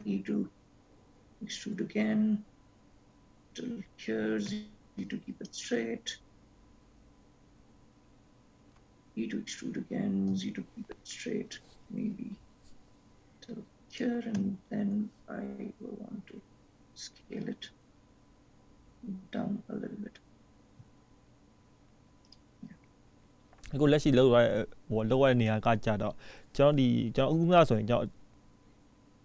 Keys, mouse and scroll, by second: 0.1 e, 9.1 e, 14.5 s.